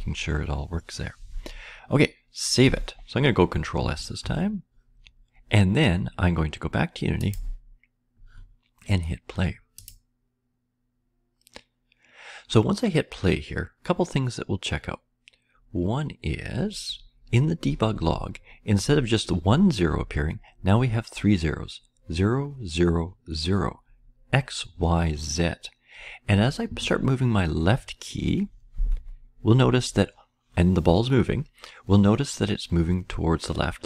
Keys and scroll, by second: 4.1 ctrl+s, 29.4 Left.